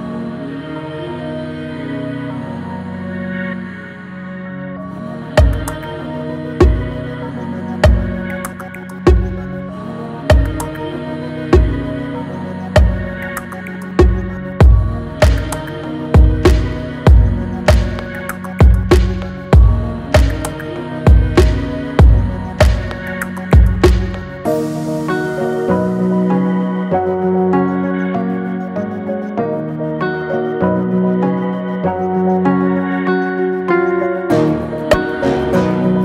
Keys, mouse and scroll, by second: 2.2 click, 3.1 right click, 4.5 click, 6.2 right click, 8.4-9.2 typing, 9.2 click, 12.3 Right, 14.7 click, 14.7 click, 16.6 click, 18.6-22.0 drag, 22.2 click, 23.2 click, 24.1 ctrl+c, 24.5 ctrl+f, 25.9-30.0 alt+shift+drag, 34.7 click.